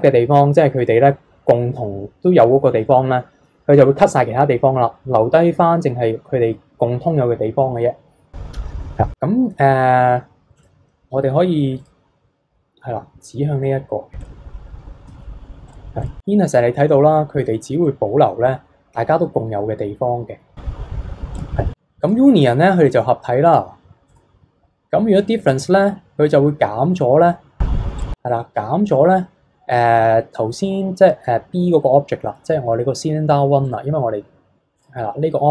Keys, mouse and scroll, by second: 10.5 click, 11.8 click, 15.7-17.8 drag, 17.8-20.7 middle drag, 21.4-27.1 drag, 28.0 click, 28.3-33.6 middle drag, 33.6 click, 34.8-35.5 drag.